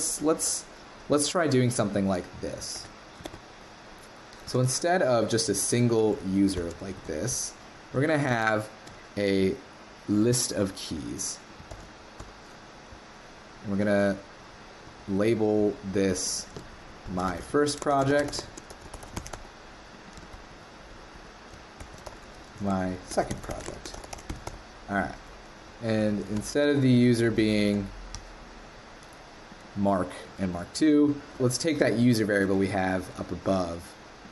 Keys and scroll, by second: 2.7 super+c, 3.2 super+Tab, 4.5 super+1, 6.6 shift+super+Left, 7.0 super+v, 11.7 super+BackSpace, 26.1 super+l, 27.4 super+BackSpace.